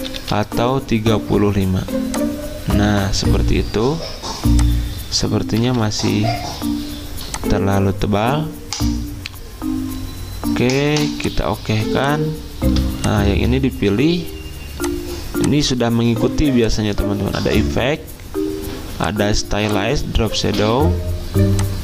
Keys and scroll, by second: 0.0-0.6 typing, 5.3-6.1 typing, 7.6 2.